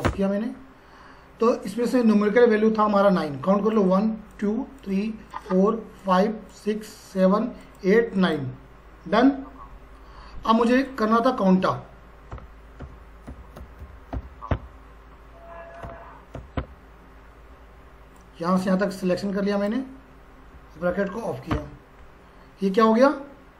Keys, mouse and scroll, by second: 0.1 Return, 3.7 click, 10.7 click, 12.1-14.6 typing, 16.3 a, 16.6 Tab, 18.2-20.8 drag, 20.8 shift+0, 21.5 Return.